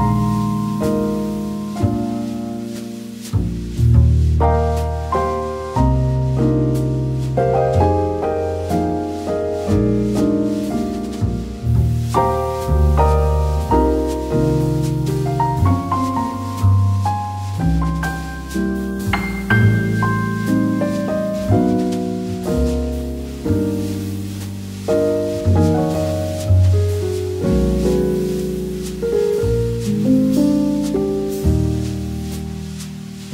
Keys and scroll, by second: 2.0 a, 14.1 v, 23.1 v, 24.8 a.